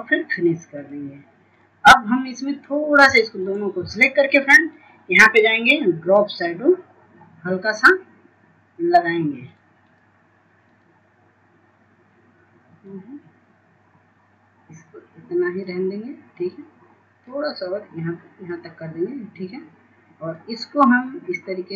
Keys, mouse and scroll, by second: 3.0 shift+click, 4.3-21.7 drag.